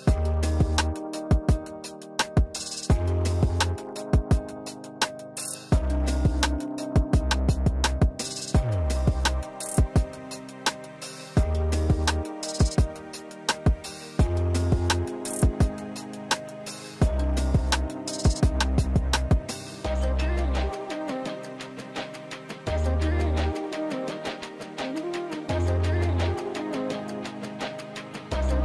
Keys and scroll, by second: 6.4 ctrl+z, 8.4 ctrl+z, 8.6 Down, 8.8 Down, 11.9 Down, 12.1 Down, 12.6 Down, 12.9 Down, 13.1 Down.